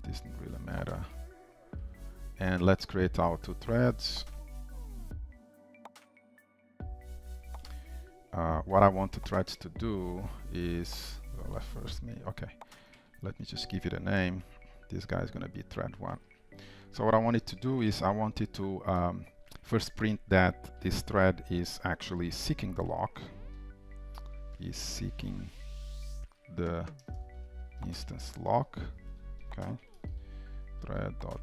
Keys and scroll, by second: 1.2 Return, 1.8 ctrl+shift+Return, 19.1 Return, 30.8 Return.